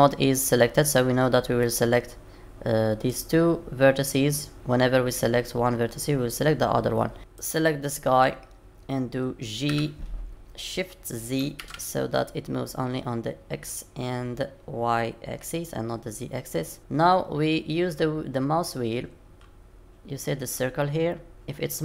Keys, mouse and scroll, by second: 1.6 middle click, 7.2 click, 9.7 g.